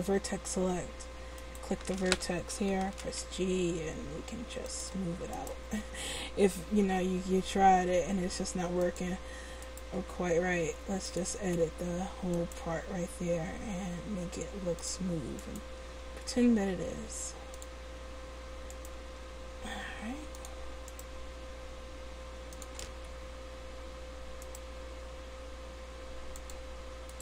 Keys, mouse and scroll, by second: 2.9 right click, 2.9 g, 5.4-7.1 right drag, 6.7 g, 7.1 click, 9.6-11.4 right drag, 9.9 g, 12.4-14.1 right drag, 12.7 g, 15.4-17.1 right drag, 15.8 g, 19.0-22.7 right drag, 19.1 g, 21.1 g, 24.5 right click, 24.8 g.